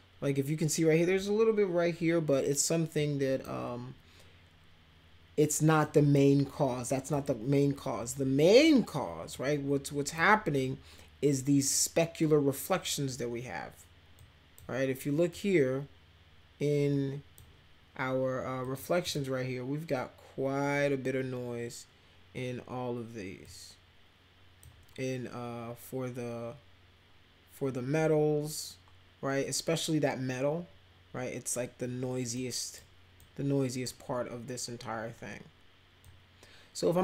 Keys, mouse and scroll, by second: 2.9 click, 5.8 click, 7.1 click, 9.3 click, 14.2-14.6 drag, 15.3-17.4 drag, 18.6 click, 19.0 click, 23.4-24.6 drag, 32.3-32.7 drag, 33.2-33.8 drag, 36.0-37.0 drag.